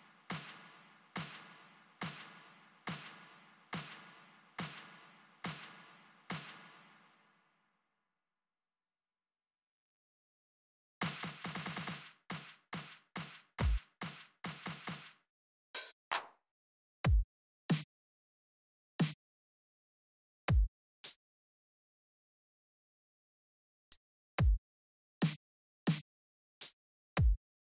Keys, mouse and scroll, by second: 6.1 click, 8.2 right click, 9.7 right click, 10.6 click, 13.3 click, 14.6 click, 15.4 click, 16.8 click, 17.4 Down, 18.7 click, 20.2 click, 20.8 click, 22.5 Up, 24.0 click, 24.9 click, 25.6 click, 26.3 click, 26.9 click.